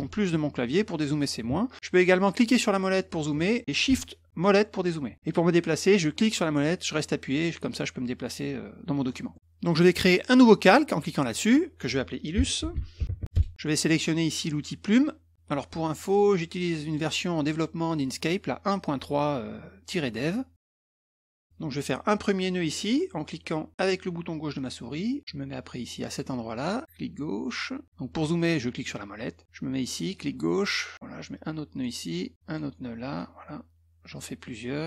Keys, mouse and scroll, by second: 2.9 middle click, 3.3 middle click, 4.4 shift+middle click, 4.7 shift+middle click, 6.1-9.1 middle drag, 9.3 middle click, 11.3 click, 12.1-13.5 typing, 16.0 click, 16.9 click, 17.9 click, 20.8 click, 21.4 middle click, 24.5 click, 28.4 middle click, 28.8 middle click, 30.1 click, 31.7 click, 32.5 click, 33.1 click, 34.1 click.